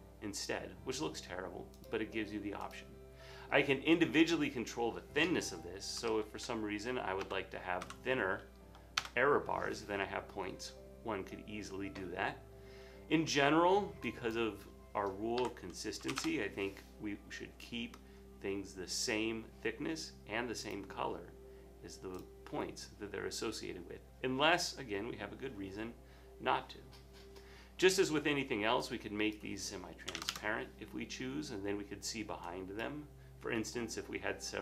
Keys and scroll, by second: 5.8-8.3 typing, 9.0 Return, 15.2-17.5 typing, 18.7 typing, 29.9-30.7 typing, 33.2-33.9 typing.